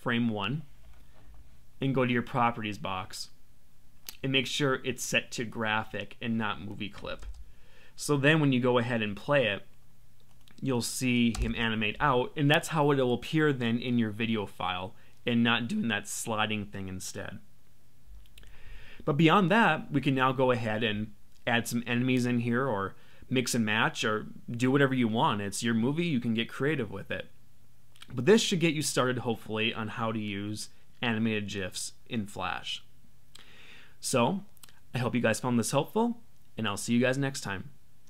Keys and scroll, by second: 7.2 Return, 11.3 Return.